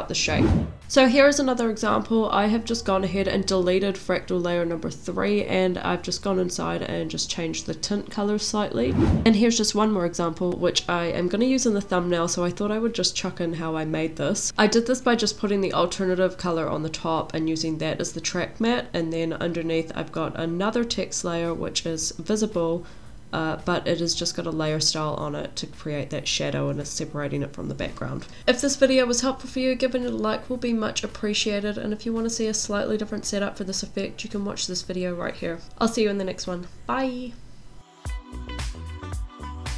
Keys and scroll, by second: 3.8 space, 9.5 space, 12.7 space.